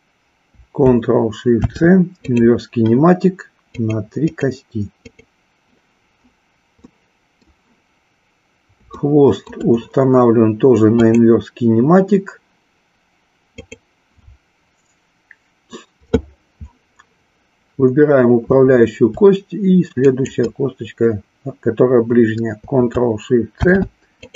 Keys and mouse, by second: 1.5 ctrl+shift+c, 3.8 click, 6.9 middle click, 8.9-9.6 shift+middle drag, 11.0-12.5 drag, 13.5-14.7 drag, 20.0-21.5 shift+drag, 23.5 ctrl+shift+c.